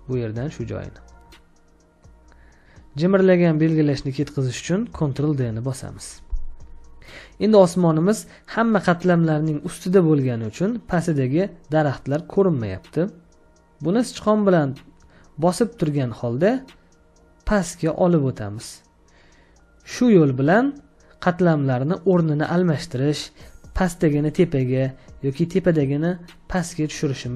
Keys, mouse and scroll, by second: 5.0 ctrl+d.